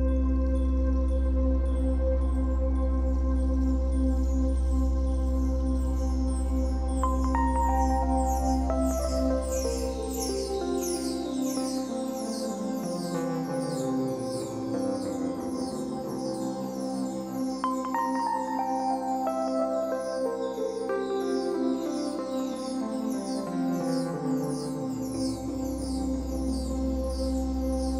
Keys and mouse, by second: 3.0 g, 4.8 click, 6.4 click, 7.3 Delete, 8.0 click, 8.5 Delete, 10.8-12.0 drag, 12.2 shift+click, 12.9-13.9 shift+drag, 15.1 a, 15.5 g, 16.6-21.6 drag, 17.5 space, 18.2 space, 18.6 space, 20.1 space, 21.6 typing, 22.0 shift+click, 23.1 typing, 24.2 click, 24.7-26.3 typing, 24.9 click, 25.7-27.9 drag.